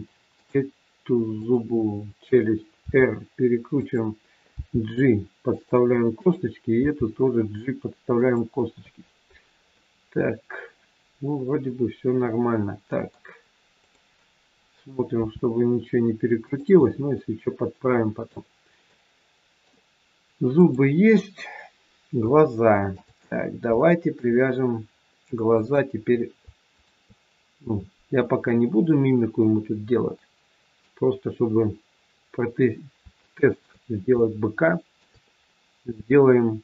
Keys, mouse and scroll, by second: 0.2 click, 1.4 click, 2.8 r, 4.5 g, 6.1 click, 6.8 g, 9.6 middle click, 13.8 click, 15.1 r, 16.8 middle click, 18.9 middle click, 20.6 click, 21.9 scroll down 1, 22.3 shift+middle click, 23.3 scroll up 1, 23.7 shift+middle click, 25.5 click, 26.7 shift+click, 28.1 middle click, 32.0-32.3 scroll down 3, 33.1 shift+middle click, 34.1 shift+middle click, 35.4-36.6 scroll up 1.